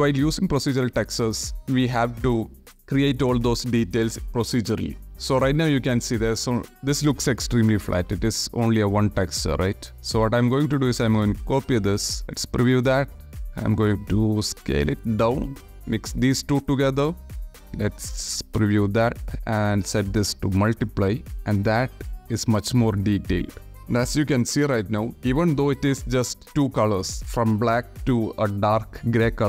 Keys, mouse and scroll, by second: 0.3 click, 4.8 click, 5.5 click, 7.9 click, 8.9 shift+d, 9.9 click, 10.4 click, 11.3-11.6 alt+drag, 12.5-14.6 drag, 15.1-16.2 drag, 18.0 ctrl+shift+click, 19.1-20.2 drag, 21.1 click, 23.1 click, 23.7 shift+KP_0, 23.8 shift+middle click.